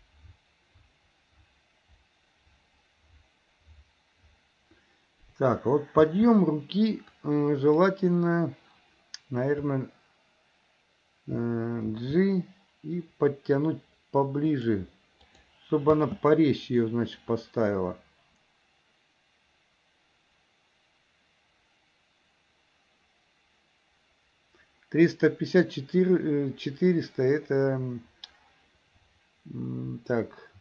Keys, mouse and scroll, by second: 6.2 space, 7.2-7.9 drag, 11.9 g, 15.5 drag, 16.2 space.